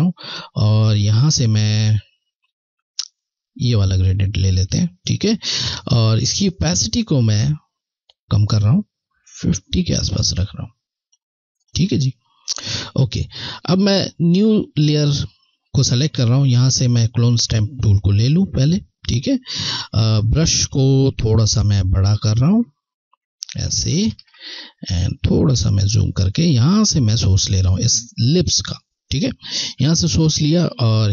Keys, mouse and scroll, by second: 0.8 ctrl+click, 16.9 ctrl+Left, 22.1 ctrl+], 25.1-25.5 scroll, 26.0-26.4 ctrl+alt+scroll, 29.4 ctrl+alt+click.